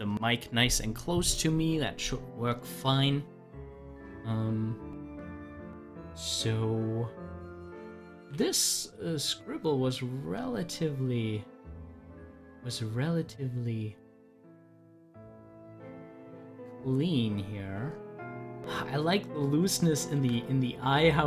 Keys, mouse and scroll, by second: 4.1-8.2 drag, 8.2 z, 8.8-12.3 drag, 12.3 ctrl+z, 15.8 ctrl+z, 18.5 ctrl+z, 20.2 ctrl+z.